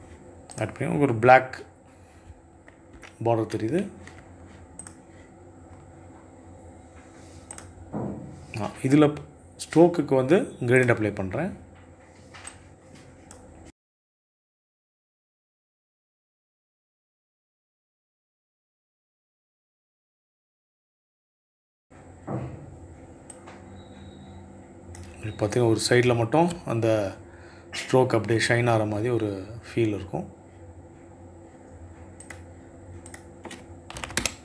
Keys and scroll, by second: 20.3 KP_2, 20.5 Return, 33.3 KP_5, 33.4 KP_0, 33.5 Return.